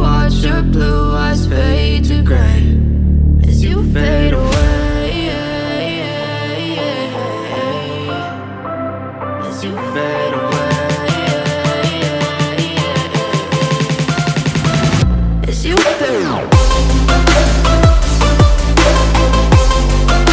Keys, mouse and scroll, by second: 5.1 double click, 12.1 double click.